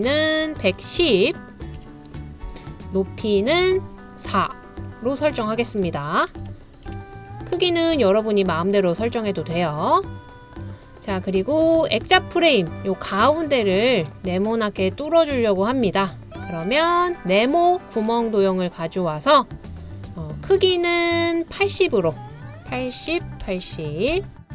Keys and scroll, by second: 0.0-2.5 typing, 6.2-7.3 typing, 10.4-11.1 typing, 12.5-14.6 typing, 22.9-24.1 typing, 24.1 Return.